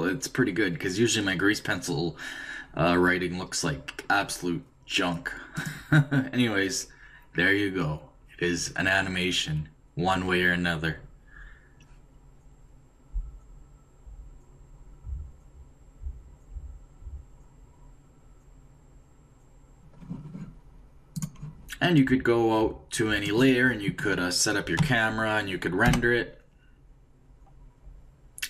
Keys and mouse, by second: 5.5-7.3 drag, 21.1-23.8 drag, 24.8 KP_0.